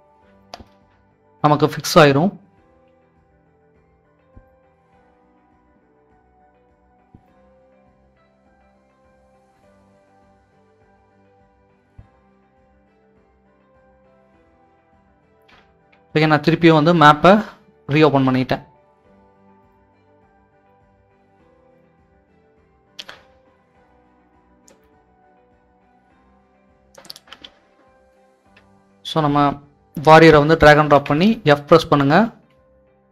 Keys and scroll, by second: 3.2 w, 3.9 w, 5.9 typing, 7.2-7.9 typing, 9.2 typing, 10.6 typing, 15.0 s, 16.4 typing, 18.1-19.0 typing, 32.3 d.